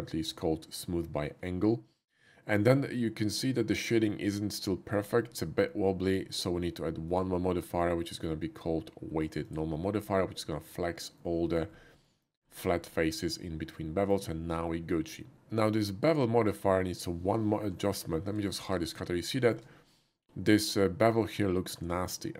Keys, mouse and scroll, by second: 2.6-3.4 middle drag, 3.7 shift+middle drag, 4.0-4.9 shift+middle drag, 6.2 shift+middle click, 7.1 click, 9.4 click, 11.2-11.5 middle drag, 12.0 shift+middle drag, 12.6 shift+middle drag, 12.9-14.1 shift+middle drag, 14.6-15.1 shift+middle drag, 16.1-17.7 shift+drag, 17.7 h, 18.1 middle click, 18.5 shift+middle click, 18.9 shift+middle click, 21.2 shift+click.